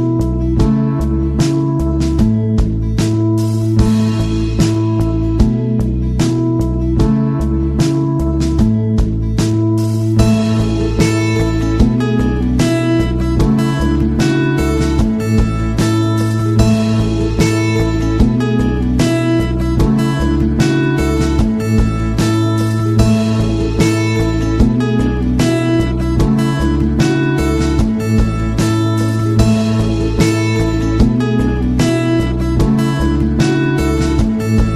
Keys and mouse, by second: 0.7 n, 1.3 middle click, 1.8 shift+middle drag, 2.3 right click, 2.5 KP_1, 3.2 shift+middle click, 3.7-4.4 middle drag, 4.5-5.1 middle drag, 5.2 KP_3, 5.7 middle click, 7.1-7.4 middle drag, 7.8-8.7 middle drag, 11.0 z, 12.2 middle click, 14.1-29.3 drag, 29.3-29.7 middle drag, 30.2 middle click.